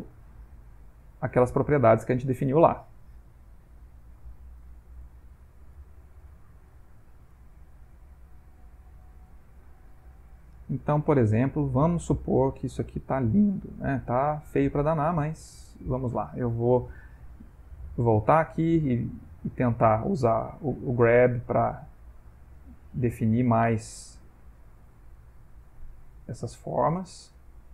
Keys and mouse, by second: 0.3 middle click, 1.0 ctrl+middle click, 1.4 shift+middle click, 3.6 ctrl+middle click, 4.7 shift+click, 5.1 shift+click, 5.8 shift+click, 6.3 shift+click, 6.7 shift+click, 7.4 shift+click, 7.8 shift+click, 8.7 middle click, 9.5 ctrl+middle click, 10.0 middle click, 11.1 shift+click, 11.4 shift+click, 12.1 shift+click, 12.5 middle click, 13.3 middle click, 14.1 shift+click, 14.6 shift+click, 15.1 middle click, 15.4 middle click, 15.6 middle click, 18.0 click, 19.3 f, 20.4 g, 21.2 click, 22.4 click, 23.1 click, 24.2 click, 24.9 click, 26.2 ctrl+middle click, 26.9 shift+middle click, 27.5 ctrl+middle click.